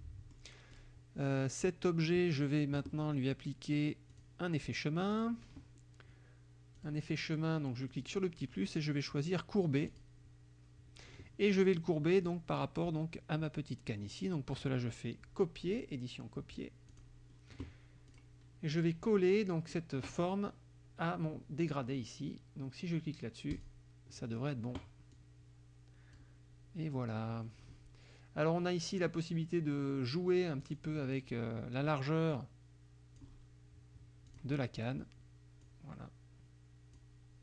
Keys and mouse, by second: 0.2 middle click, 0.7 click, 4.1 click, 5.1 click, 6.8 click, 7.9 click, 9.9 click, 12.2 click, 12.6 middle click, 15.8 click, 16.9 click, 18.1 click, 23.6 click, 25.1-26.4 drag, 30.6 click, 32.4 click, 34.4 click, 35.6-37.2 drag.